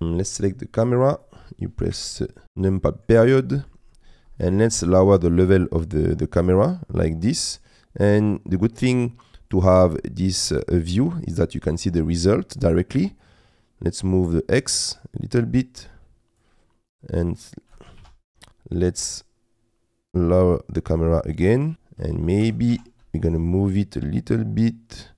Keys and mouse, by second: 1.1 click, 1.9 KP_Decimal, 2.4 middle click, 3.4 middle click, 5.2-9.5 drag, 13.3-16.4 drag, 16.9 click, 18.0 ctrl+z, 18.0 ctrl+a, 19.1-21.7 drag, 22.5 g, 22.7 shift+z.